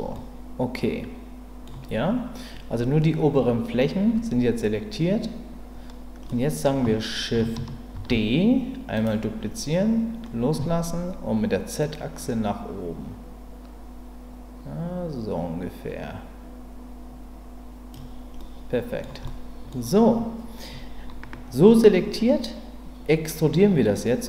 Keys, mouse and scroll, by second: 0.1-1.6 middle drag, 6.3 middle click, 7.9 shift+d, 11.8-17.9 drag, 18.4 middle click, 19.2 middle click.